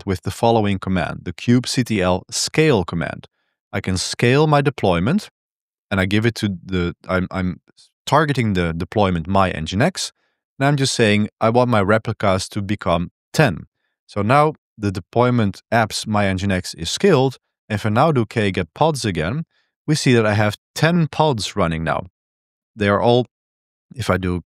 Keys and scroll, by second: 13.7 Return, 17.5-19.3 typing, 24.3-24.4 typing.